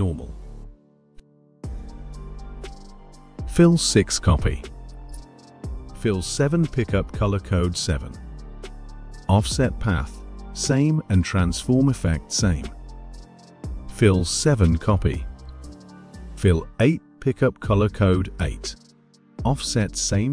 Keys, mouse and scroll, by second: 2.2 click, 2.9 click, 4.7 click, 7.8 click, 10.4 click, 11.0 click, 13.8 click, 19.8 click.